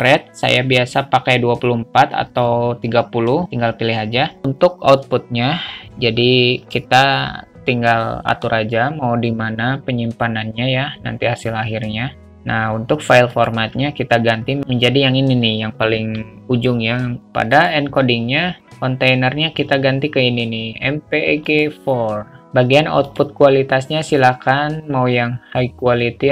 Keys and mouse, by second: 0.1-4.2 drag, 13.6-17.2 drag, 17.8 click, 18.7-22.0 drag, 23.4-26.3 drag.